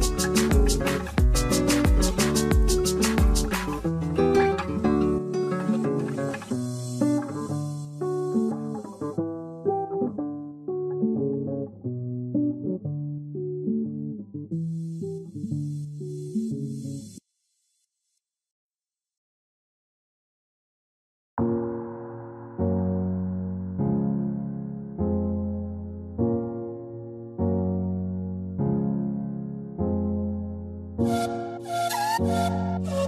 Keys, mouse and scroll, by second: 4.7 double click, 21.3-22.7 scroll down 1, 27.6 shift+click, 28.8 space, 29.7-30.9 Return, 32.4 shift+click.